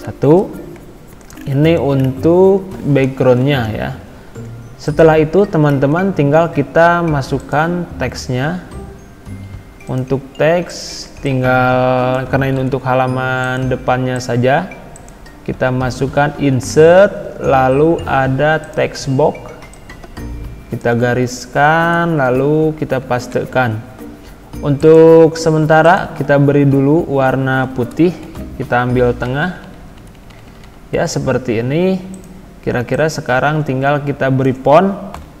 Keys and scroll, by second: 3.2 ctrl+z, 12.5 ctrl+c, 22.2 ctrl+v, 23.3 ctrl+a, 28.2 ctrl+e.